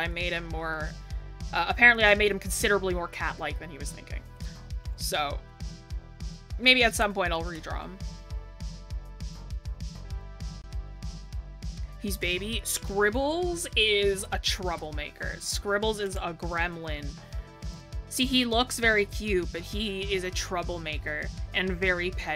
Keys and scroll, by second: 5.8 scroll down 1.